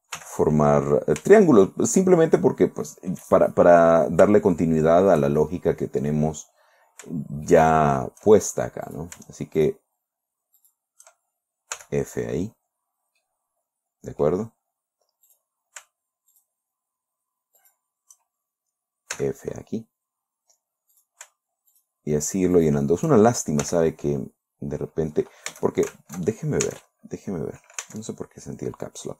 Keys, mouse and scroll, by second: 0.7 shift+f, 1.9-3.8 shift+drag, 4.0 shift+scroll down 3, 5.0 shift+click, 5.9 shift+click, 6.9-7.3 scroll up 1, 7.9 shift+click, 9.3 right click, 10.1 shift+right click, 11.1 shift+right click, 12.2 f, 13.7 middle click, 13.8 scroll down 2, 15.7 right click, 16.8 shift+right click, 18.1 shift+right click, 19.6 f, 21.4 right click, 22.2 shift+right click, 23.0 shift+right click, 24.1 f, 27.1 Caps_Lock, 28.3 Caps_Lock.